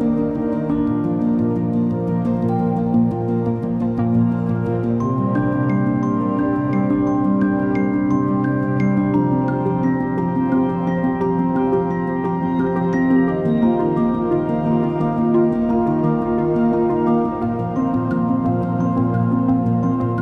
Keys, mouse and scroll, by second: 0.3-1.1 scroll down 4, 1.1 click, 1.6 scroll down 3, 2.7-6.3 drag, 7.3 space.